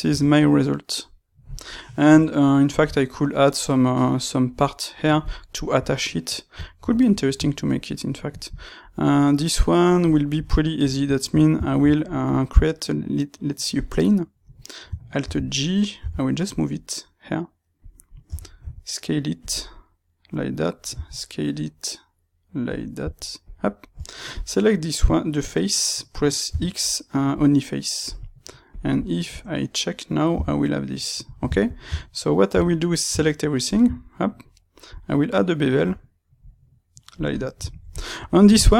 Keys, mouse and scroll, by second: 8.9 middle click, 15.9 g, 18.5 s, 19.5-22.9 middle drag, 20.8 s, 22.9 s, 24.3-28.7 drag, 29.2 Tab, 30.3 g, 31.3 click, 31.4 shift+middle click, 31.7 Tab, 32.4 a, 33.0 space, 37.3 middle click.